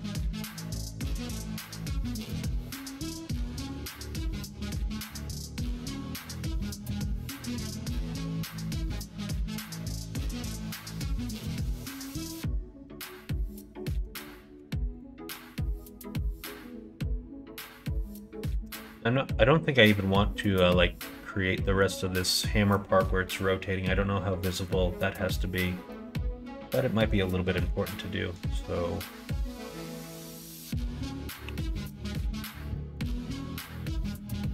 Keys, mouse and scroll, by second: 3.1 1, 3.5 click, 4.3 shift+click, 7.8 s, 9.4 2, 10.3 alt+click, 11.2 ctrl+d, 11.8 ctrl+f, 14.5 ctrl+f, 16.1 middle click, 17.5 middle click, 18.8 middle click, 19.9 middle click, 21.6 middle click, 24.6-25.6 middle drag, 25.9 middle click, 27.1 middle click, 28.3 middle click, 29.6 middle click, 30.3 click, 31.4 3, 32.0 alt+click, 32.7 middle click, 33.8 middle click.